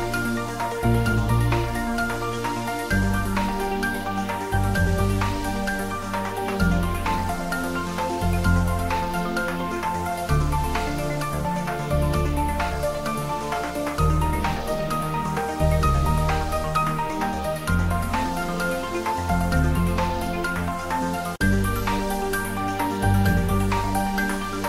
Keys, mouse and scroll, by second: 0.4 r, 3.2 click, 3.6 ctrl+z, 6.2 s, 9.9 click, 10.1 Tab, 10.4-12.2 middle drag, 12.2 shift+middle click, 12.8 middle click, 13.2 shift+middle click, 13.9 ctrl+middle click, 14.2 middle click, 14.6 Tab, 15.5 ctrl+r, 15.6 click, 18.0 click, 18.4 ctrl+r, 18.6 click, 21.1 click, 21.3 middle click, 22.2 click, 22.8 3, 23.0 click, 23.2 middle click, 24.4 click.